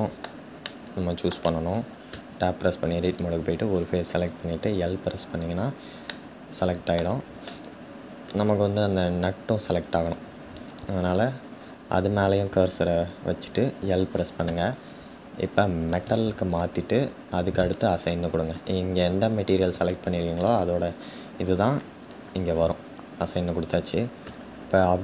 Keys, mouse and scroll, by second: 2.1 Tab, 4.1 l, 5.9-8.1 middle drag, 8.1 click, 15.5 click, 17.6-19.5 drag, 19.9 click, 24.0 Tab, 24.7 scroll down 1.